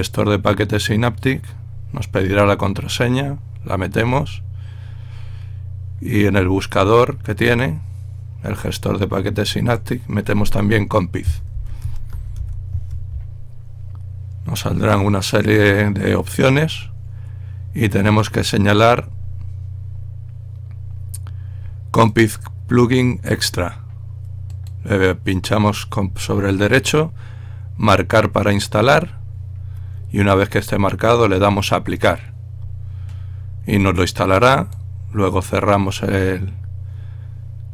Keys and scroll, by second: 11.6-13.1 typing.